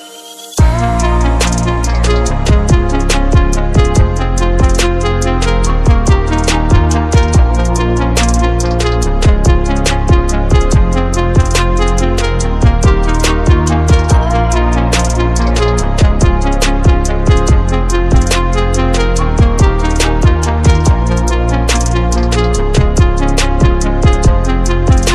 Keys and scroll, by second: 0.3 ctrl+-, 8.0 ctrl+z.